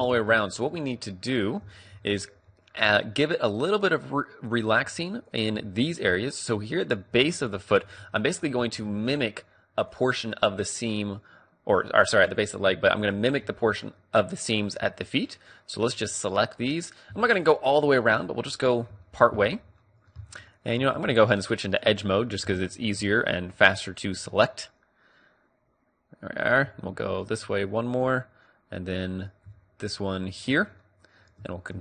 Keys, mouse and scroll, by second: 0.0 shift+space, 0.5-2.6 middle drag, 2.8 middle click, 3.6 middle click, 4.8 a, 6.2-7.9 middle drag, 7.2 a, 7.9 right click, 8.1 click, 8.7-10.2 d, 9.1-10.2 drag, 10.5-12.0 right drag, 11.1 d, 12.2-16.2 right drag, 16.2-23.9 middle drag, 18.6 click, 18.8 click, 19.0 click, 21.0 ctrl+Tab, 23.5 right click, 24.2 middle click, 24.3 right click, 24.4-25.9 middle drag, 27.1-28.5 middle drag, 28.7 middle click, 29.3-30.9 drag, 30.1-31.8 middle drag, 31.6 ctrl+e.